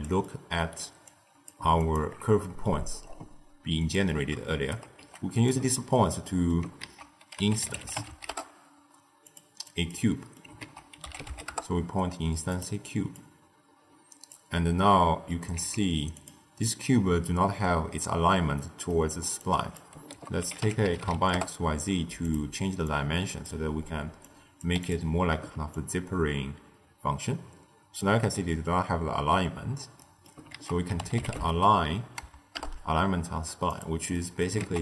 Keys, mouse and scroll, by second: 0.2 middle click, 0.9 click, 1.7 alt+shift+click, 2.4 middle click, 2.7-3.7 scroll up 6, 3.7 click, 4.4 shift+right click, 4.9 g, 5.7-6.7 ctrl+middle drag, 6.7 ctrl+a, 9.5 click, 10.0 middle click, 10.5 ctrl+a, 13.1 click, 15.4 z, 16.6-18.3 middle drag, 18.3-18.8 scroll up 1, 18.8 middle click, 19.3 click, 20.0 ctrl+a, 22.7 click, 24.1 click, 25.6-28.7 shift+drag, 29.9 middle click, 30.4 ctrl+a, 34.0 middle click, 34.5 ctrl+a.